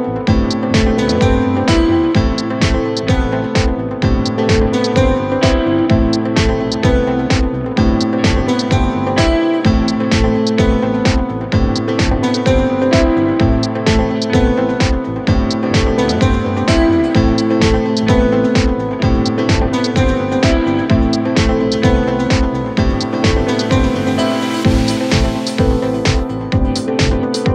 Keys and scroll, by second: 14.9 ], 19.2 ctrl+z, 19.8 ].